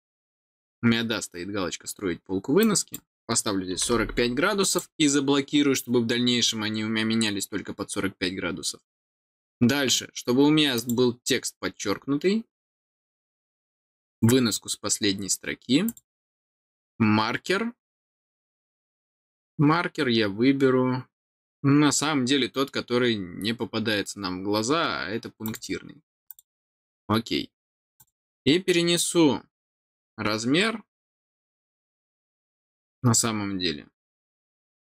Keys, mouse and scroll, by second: 2.6 click, 4.6 click, 10.7 click, 15.8 click, 25.4 click, 26.2 click, 27.9 click.